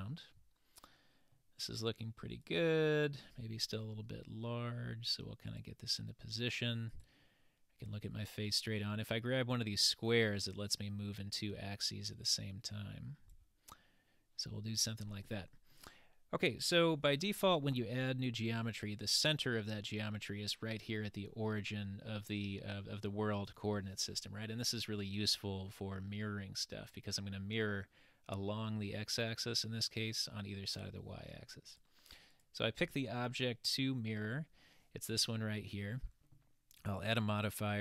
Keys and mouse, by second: 0.1-1.4 middle drag, 2.5-3.1 drag, 7.0 click, 10.2-13.4 drag, 15.7-16.7 middle drag, 31.7 click, 32.3 click, 36.9-37.8 drag.